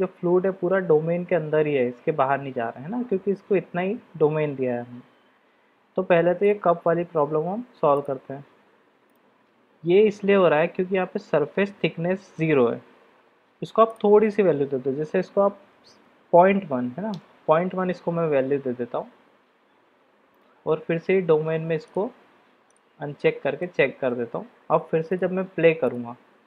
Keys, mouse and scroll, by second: 6.6 click, 14.0-18.2 drag, 20.3 click, 23.6-24.1 middle drag, 25.2-26.1 drag.